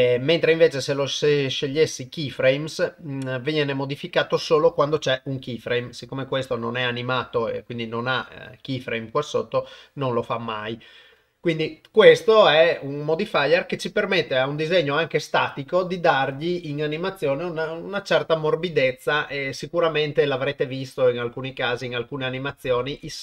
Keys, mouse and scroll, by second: 0.5-1.9 drag, 9.7-10.7 drag.